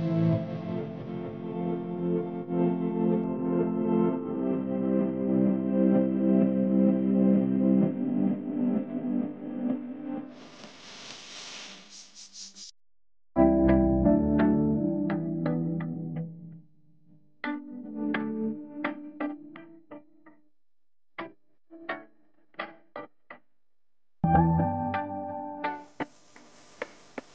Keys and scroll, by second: 3.6-5.3 typing, 6.4 typing, 9.9-10.4 typing, 13.1 space, 14.2 space, 14.9 super+space, 15.5 super+space, 18.6 space, 19.1 alt+super+space, 19.2 alt+super+space, 19.3 alt+super+space, 19.4 alt+super+space, 19.5 alt+super+space, 19.6 alt+super+space, 19.7-20.4 alt+super+space, 20.3-21.1 super+space, 21.7 typing, 21.8 super+space, 22.6 super+z, 23.1 super+z, 23.1 super+z, 23.3 super+z, 26.8 space.